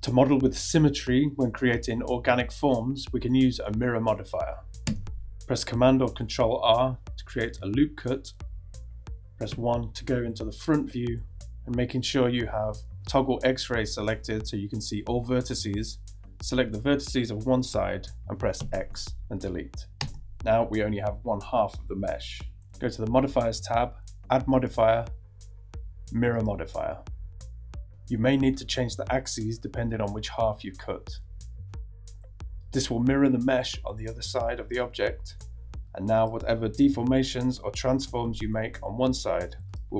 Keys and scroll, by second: 4.8 Tab, 6.1 super+r, 8.5 ↺, 18.6 x, 20.0 Return, 35.9 g, 36.9 g, 37.4 g, 39.7 super+z.